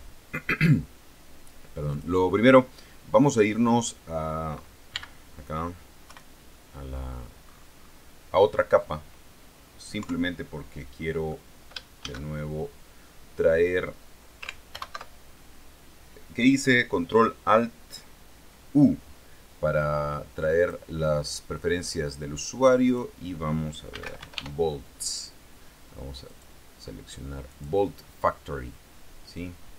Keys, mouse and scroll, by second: 0.3 scroll down 2, 2.1 click, 4.0 middle click, 5.1 n, 6.2 KP_1, 7.3-7.6 scroll down 2, 7.6 scroll up 2, 7.9 scroll down 2, 10.2 KP_3, 11.2 middle click, 12.2 shift+a, 14.9 ctrl+alt+u, 20.8 click, 23.0 click, 23.8-25.0 typing, 26.4 click, 27.7 click.